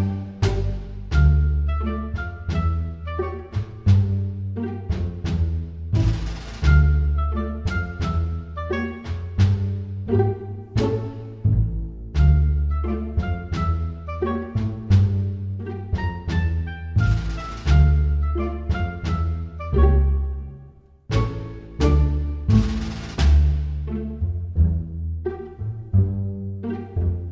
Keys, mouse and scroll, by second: 7.2 right click, 8.6 middle click, 11.2 g, 14.4 middle click, 15.5 f, 17.4 click, 20.3 f, 20.9 g, 25.2 middle click, 27.2-27.3 scroll up 2.